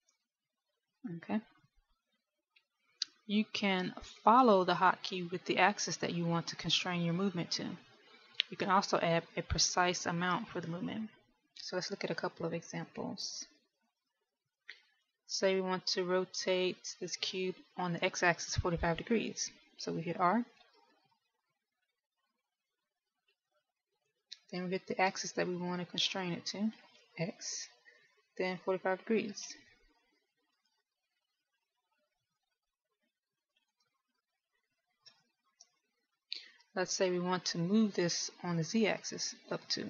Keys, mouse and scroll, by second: 1.0 ctrl+z, 23.7 middle click, 24.5 r, 32.3 middle click, 34.9 ctrl+z, 36.8 KP_1.